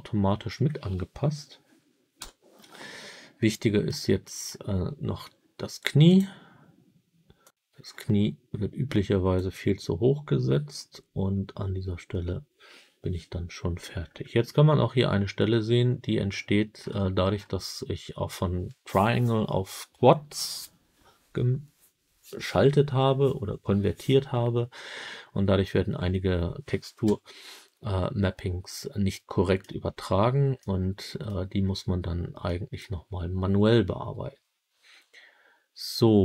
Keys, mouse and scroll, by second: 2.1 KP_3, 3.3 middle click, 4.2 middle click, 6.0 click, 6.0-6.3 scroll up 1, 7.3-9.3 drag, 13.8 scroll up 1, 14.5 scroll up 9, 16.6-17.4 scroll down 10, 26.9 KP_1, 29.0 middle click, 29.8-30.5 scroll down 3, 30.5 middle click, 31.6-32.1 scroll up 1, 32.3 middle click.